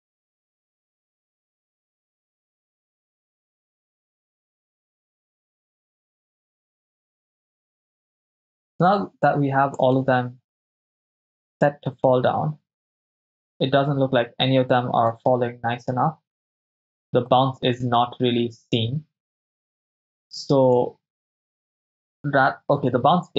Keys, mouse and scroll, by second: 0.1 right click, 0.3 click, 0.4 ctrl+v, 0.6 Right, 0.6 Right, 0.9 right click, 1.0 click, 1.0 click, 1.2 ctrl+v, 1.3 Right, 1.3 Right, 1.5 right click, 1.6 click, 1.8 click, 1.9 ctrl+v, 1.9 Right, 2.0 Right, 2.1 right click, 2.3 click, 2.5 ctrl+v, 2.5 Right, 2.6 Right, 2.9 click, 2.9 right click, 3.1 ctrl+v, 3.2 Right, 3.3 Right, 3.5 right click, 3.7 click, 3.8 ctrl+v, 3.9 Right, 4.0 Right, 4.1 right click, 4.3 click, 4.5 ctrl+v, 4.6 Right, 4.7 Right, 4.9 right click, 5.0 click, 5.1 click, 5.2 click, 5.3 ctrl+v, 5.4 Right, 5.5 Right, 5.6 right click, 5.8 click, 5.8 click, 6.1 ctrl+v, 6.1 Right, 6.4 right click, 6.5 click, 6.8 ctrl+v, 6.9 Right, 7.1 Right, 7.2-8.1 typing, 7.4 drag, 8.1-10.0 drag, 10.1 shift+space, 15.2 shift+space, 17.5-20.9 drag, 21.9 Right, 22.1 Right, 22.5 Right, 22.9 Right, 23.1 Right, 23.3 Right.